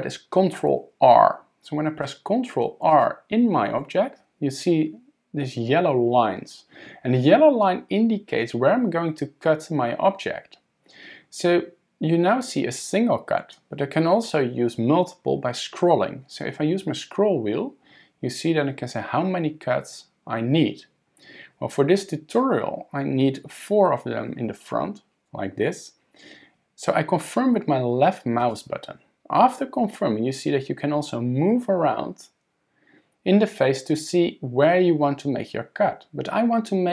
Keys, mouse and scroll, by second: 2.9 click, 3.8 ctrl+r.